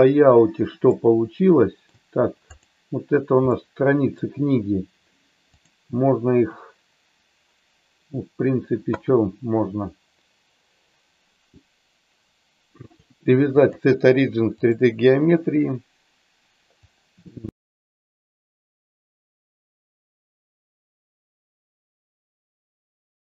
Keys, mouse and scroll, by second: 0.9-2.0 middle drag, 2.7 click, 3.5 middle click, 5.6 click, 12.9-14.7 drag, 16.8-18.0 drag, 18.2-19.4 middle drag, 19.6 middle click, 20.0 ctrl+z, 20.4 KP_3, 20.6 KP_1, 21.3 click, 22.1 middle click, 22.7 click.